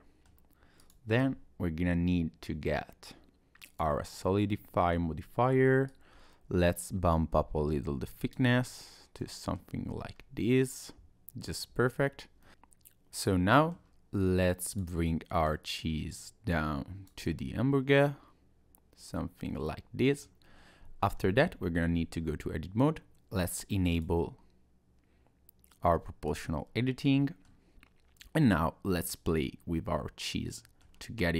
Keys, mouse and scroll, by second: 0.8 click, 4.1 middle click, 5.9 click, 8.6 middle click, 9.9 Tab, 10.1-10.5 scroll up 2, 10.5-11.4 scroll down 2, 11.4 click, 11.7 Tab, 12.4 middle click, 12.5 click, 14.7 click, 15.5 click, 17.3 middle click, 20.9 scroll up 1, 21.2 scroll down 1, 21.4 Tab, 23.9 click, 26.3 click, 26.8 middle click, 28.4 middle click.